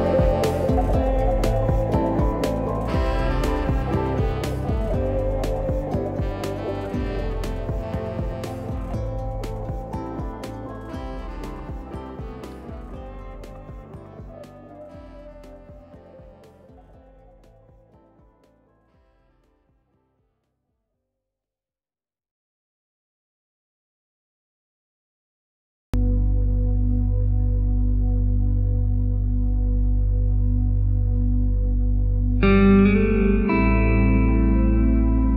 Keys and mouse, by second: 0.5 shift+middle click, 1.1 shift+middle click, 1.6 alt+z, 2.1 shift+middle click, 2.7 alt+z, 4.4 right click, 4.7 g, 5.9 g, 6.8 right click, 7.8 g, 8.7 right click, 9.1 g, 11.0 right click, 11.1 g, 12.1 g, 13.3 right click, 13.6 g, 14.9 right click, 15.2 g, 16.3 g, 17.2 g, 19.6 c, 20.2 right click, 20.7 shift+right click, 21.7 KP_1, 22.3 alt+z, 22.7 shift+middle click, 23.5 e, 24.5 r, 28.3 w, 29.7 KP_3, 30.6 KP_1, 31.5 alt+z, 31.8 KP_3, 32.5 alt+z, 33.0 shift+middle click, 33.6 middle click.